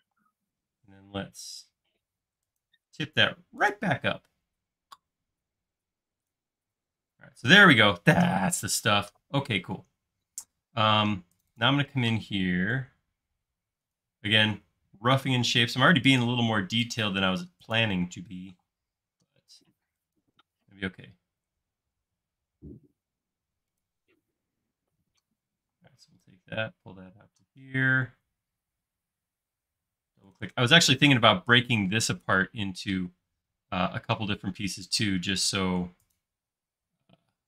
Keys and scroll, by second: 0.0 q, 1.9 Left, 6.7 space, 10.7-11.0 typing, 12.0 typing, 17.5 space, 18.5 m, 24.3 space, 25.7 p, 29.7 Escape, 34.4 l.